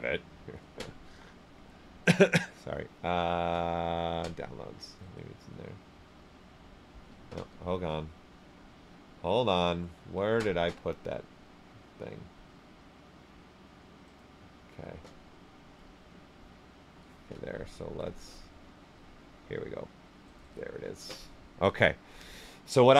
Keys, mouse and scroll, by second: 7.1 click, 9.6 click, 10.8-11.3 scroll down 1, 16.1 click, 17.7 click, 17.8 alt+Tab, 20.2 alt+Tab, 22.5 click.